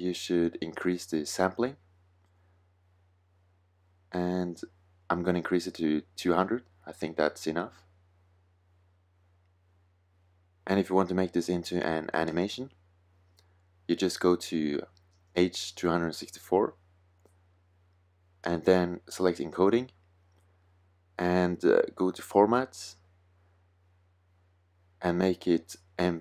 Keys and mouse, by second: 4.0-7.4 drag, 7.4 KP_0, 10.9-13.0 middle drag, 13.0-15.0 drag, 18.5-22.0 middle drag, 25.3-26.2 drag.